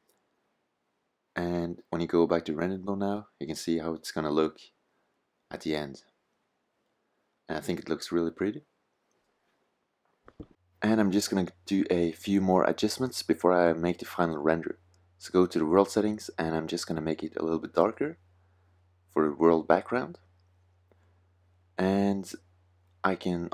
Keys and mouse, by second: 1.5 click, 2.5 click, 14.4-16.9 drag.